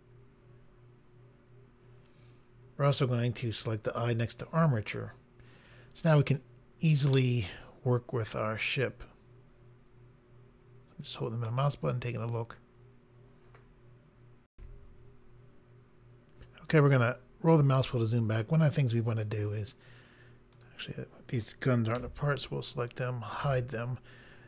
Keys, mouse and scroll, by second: 3.9 click, 7.2 middle click, 14.5 Pause, 16.8-17.5 scroll down 1, 20.5 click, 21.9 h, 22.9 click, 23.4 h.